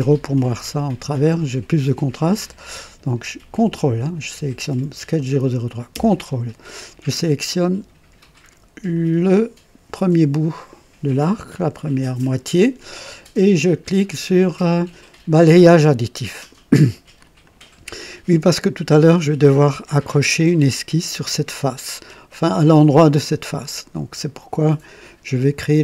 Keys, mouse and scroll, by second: 0.3-1.1 ctrl+right drag, 8.9 ctrl+click, 15.3 click, 17.4 click, 18.4-19.3 drag, 19.6 click, 22.1 scroll up 1, 22.6-23.3 drag.